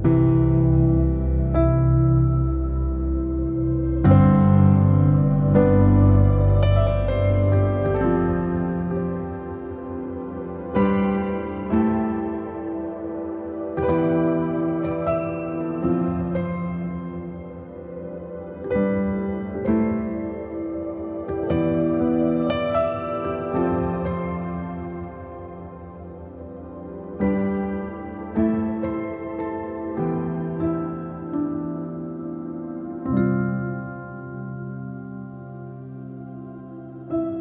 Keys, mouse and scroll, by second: 0.3 middle click, 0.9 scroll up 1, 1.1 click, 1.3 middle click, 1.5-2.2 scroll up 4, 1.7 shift+middle click, 2.2-3.4 middle drag, 3.4 click, 4.4 click, 4.8 middle click, 5.4 middle click, 5.7 click, 6.0 right click, 6.4-8.1 shift+middle drag, 8.1 click, 8.3 click, 8.4 middle click, 8.9 click, 9.1-9.5 scroll down 2, 9.5 shift+d, 10.4 click, 10.6 middle click, 11.0 click, 11.7 shift+middle click, 12.1-12.7 shift+scroll up 1, 12.7 click, 14.4 middle click, 14.7 click, 14.8 click, 15.3 shift+click, 16.1 ctrl+l, 16.2 click, 17.7 shift+middle click, 18.1-18.4 shift+scroll up 2, 21.6 f, 23.6-25.6 drag, 25.6 middle click, 26.2 ctrl+z, 26.4 middle click, 26.9-31.9 drag, 31.9-34.9 middle drag, 34.9-35.9 shift+drag, 35.9-37.1 middle drag.